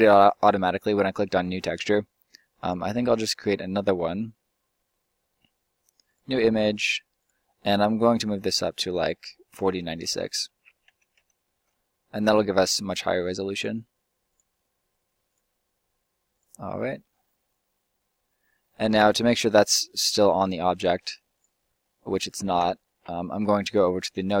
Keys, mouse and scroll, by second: 19.4 right click, 19.6-22.3 drag, 20.9-22.3 right drag, 22.3 ctrl+z.